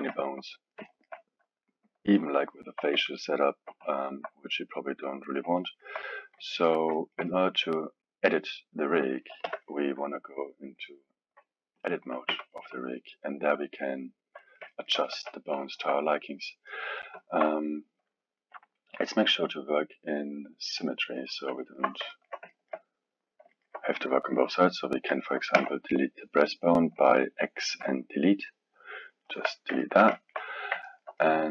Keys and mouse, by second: 5.2 KP_1, 5.6-9.4 alt+middle drag, 9.4 n, 10.7 click, 11.7 click, 12.3 Tab, 13.0-15.1 middle drag, 15.1 KP_1, 15.6-20.5 alt+middle drag, 20.8 click, 21.6-24.5 alt+middle drag, 24.5-25.0 drag, 25.5 x, 29.8-31.5 ctrl+middle drag.